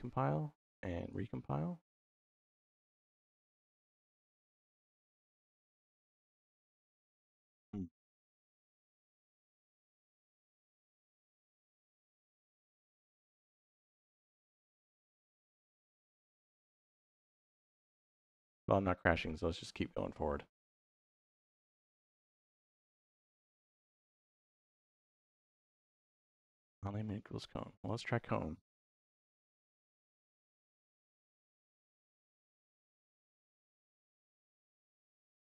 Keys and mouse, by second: 0.9 click, 2.0-2.7 drag, 4.8 click, 5.0 click, 6.4 click, 15.5 click, 17.4 middle click, 21.0 middle click, 22.9 click, 27.7-30.4 drag, 31.6 click, 32.4 x, 33.1 click, 33.8-35.4 drag.